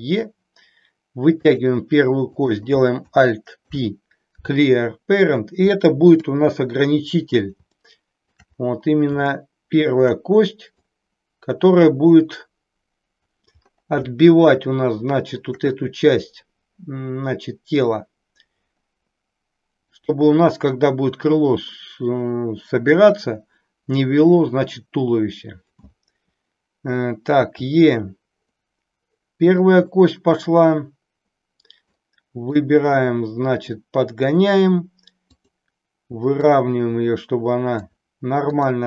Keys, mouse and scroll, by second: 1.4 click, 2.4 click, 3.5 alt+p, 6.1 KP_7, 7.8 shift+middle click, 9.2 shift+middle click, 10.8-13.3 drag, 14.2-15.5 shift+middle drag, 19.9 click, 27.6 e, 29.9-31.9 middle drag, 32.5-34.2 drag, 35.4 click, 36.5-37.9 drag, 38.4 click.